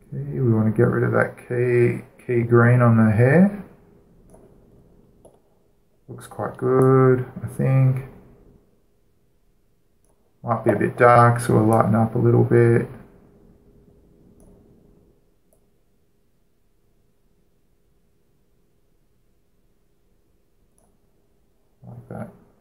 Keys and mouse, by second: 0.2-2.1 drag, 5.0-6.9 drag, 6.8 middle click, 7.6 click, 10.8-14.2 drag, 15.2-18.1 drag, 21.5-22.6 drag.